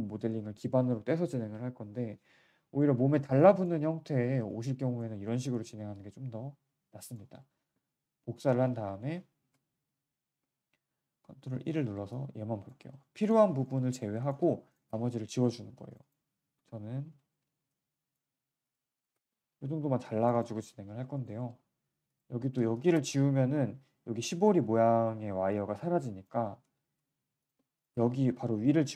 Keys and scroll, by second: 9.3 ctrl+w, 10.3 z, 15.6 Delete, 16.5 Delete, 17.5 w, 18.2 q, 19.9 Delete, 20.4 Delete, 23.4 Delete, 26.5 z, 26.9 z.